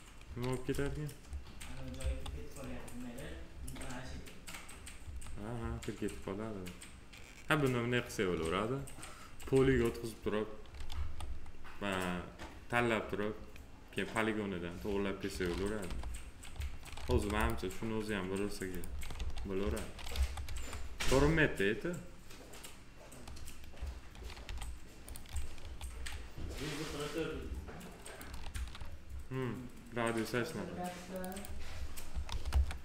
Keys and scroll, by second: 0.6 f, 1.9 F4, 3.5 F4, 5.0 F4, 10.9 F4, 15.8 p, 19.1 alt+x, 20.1 F4, 24.4 f, 28.4 ctrl+z, 32.0 6, 32.4 Return.